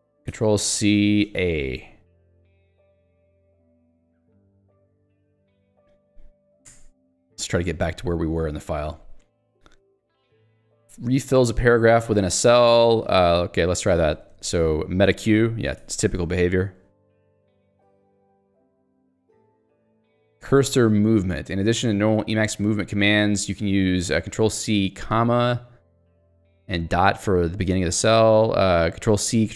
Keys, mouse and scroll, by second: 0.1 ctrl+s, 0.4-1.9 typing, 3.6 ctrl+j, 6.8 Return, 8.3 click, 9.6 q, 10.5 Escape, 10.7 j, 12.2 k, 12.7 shift+a, 13.3 Delete, 15.3 alt+q, 15.9 Escape, 16.2-19.1 typing, 17.4 Escape, 21.6 k.